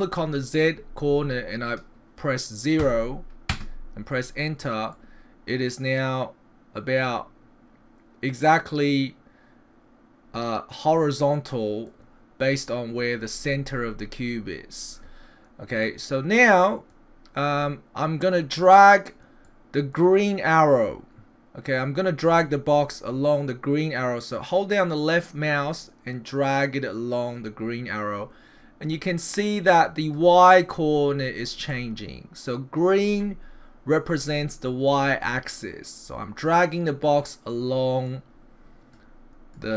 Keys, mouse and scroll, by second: 4.9 middle click, 13.4-15.8 scroll up 4, 15.8 middle click, 15.8 scroll up 1, 19.4 middle click, 24.6 click, 31.7 middle click, 34.9 click, 38.1 click, 39.5 click.